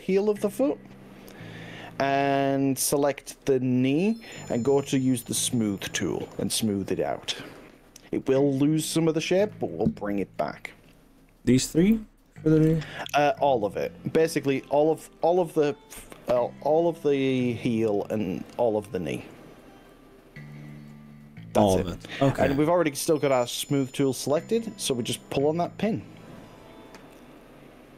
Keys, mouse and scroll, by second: 2.1-3.5 middle drag, 4.8 click, 5.9-7.4 middle drag, 9.7 middle click, 11.0-12.4 shift+drag, 12.7 shift+middle click, 13.6 middle click, 16.4 z, 18.6 click, 20.0 shift+click, 20.9-23.7 middle drag, 25.8 click.